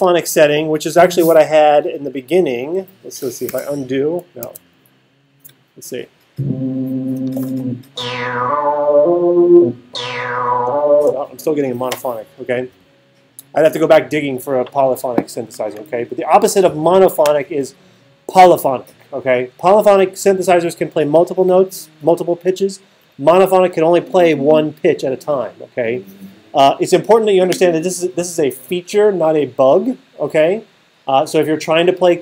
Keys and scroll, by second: 3.5 super+z.